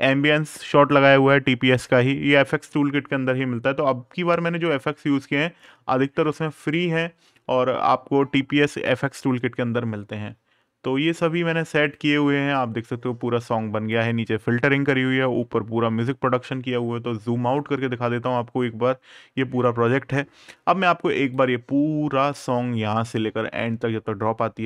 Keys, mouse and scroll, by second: 4.3-5.1 ctrl+scroll, 8.5 right click, 9.6-10.0 scroll up 1, 10.0-10.4 scroll down 1, 11.7 click, 13.9-14.6 scroll down 1, 14.6 scroll up 1, 17.3 click, 18.8 scroll up 1, 21.1 click.